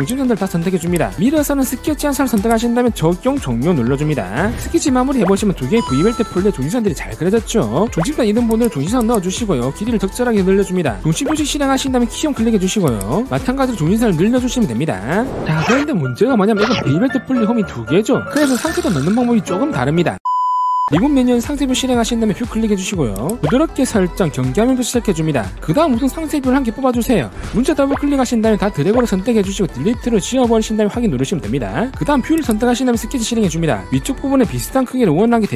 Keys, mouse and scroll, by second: 0.8 click, 1.9 click, 2.8 click, 3.4 click, 3.8 click, 4.8 click, 5.6 click, 8.3 click, 8.7 click, 9.3 click, 9.9 click, 10.5 click, 11.2 right click, 11.8 click, 12.2 middle click, 13.2 click, 13.9 click, 14.9 click, 22.4 click, 24.0 click, 25.0 click, 26.0 click, 26.4 middle click, 26.8 scroll down 1, 27.0 middle click, 28.0 click, 28.2 click, 28.4 click, 29.4 click, 31.6 click, 33.4 click, 35.4 click.